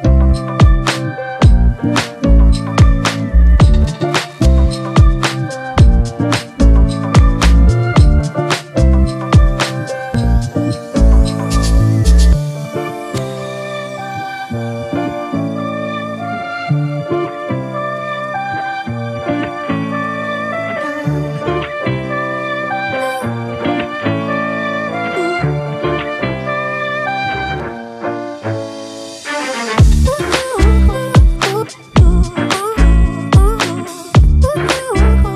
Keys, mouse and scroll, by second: 32.1 double click.